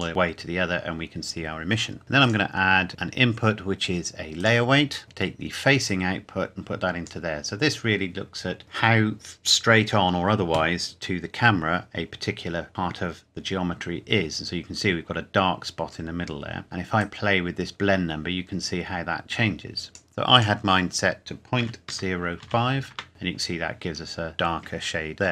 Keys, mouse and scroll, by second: 2.2 click, 4.4 click, 5.9 click, 17.0 click, 21.6 KP_Decimal, 21.9 KP_0, 22.4 KP_5, 22.9 KP_Enter.